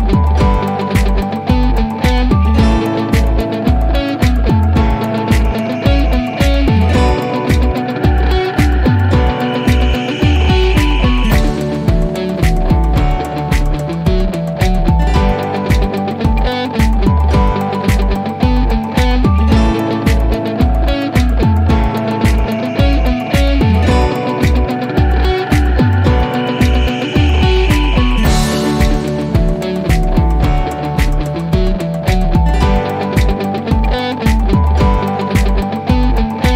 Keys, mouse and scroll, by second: 0.1 click, 0.6-2.1 scroll down 1, 4.1 click, 5.0-9.6 drag, 31.3-33.1 drag.